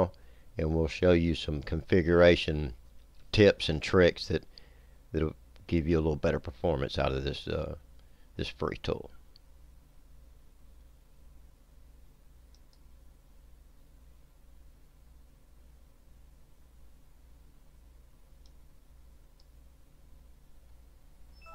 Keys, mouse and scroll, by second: 12.6 click, 18.5 click.